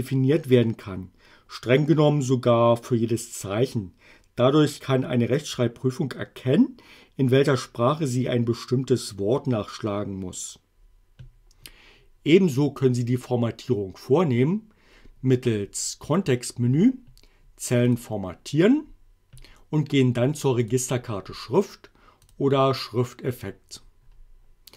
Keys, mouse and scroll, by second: 15.5 right click, 18.0 click, 20.7 click, 22.3 click.